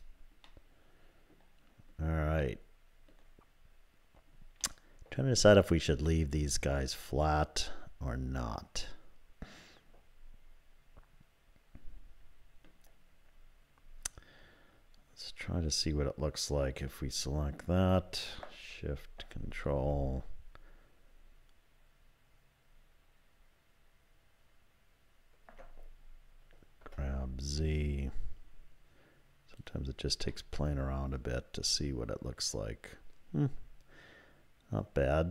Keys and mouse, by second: 0.5-1.5 drag, 2.4 click, 4.6 middle click, 6.1-12.7 middle drag, 19.3 ctrl+KP_Add, 26.8 g, 30.3-35.3 drag.